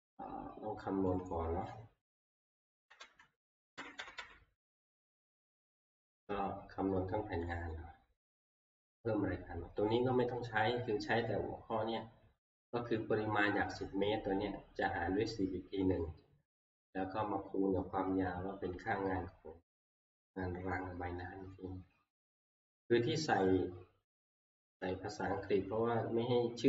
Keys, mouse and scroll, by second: 1.3-3.0 drag, 2.9 ctrl+Page_Up, 3.8 ctrl+Page_Down, 4.0 ctrl+Page_Down, 4.2 ctrl+Page_Down, 7.5 click, 10.2 click.